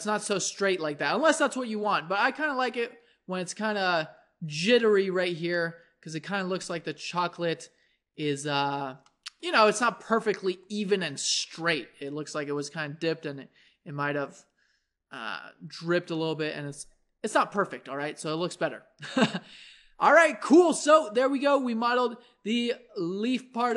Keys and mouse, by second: 2.2 Tab, 5.6 middle click, 6.4 a, 6.8-9.4 middle drag, 10.4-22.5 middle drag, 22.5-23.7 drag.